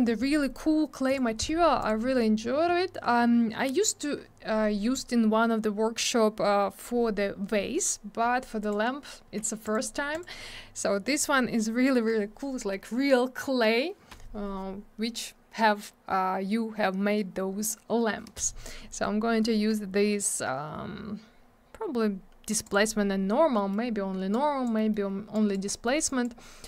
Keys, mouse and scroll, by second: 1.1 click, 1.2 click, 1.8 click, 1.9 click, 8.6 click, 8.7 click, 9.7 click, 9.7 click, 10.1 click, 10.2 click, 11.7 scroll down 1, 22.7 click, 22.7 click, 23.5 scroll down 1, 23.6 middle click, 23.7 middle click, 23.9-24.2 scroll up 1, 24.3 click, 24.8 middle click, 24.9 scroll up 1, 25.3 click, 25.7 middle click, 25.9 middle click, 26.1 click, 26.2 double click.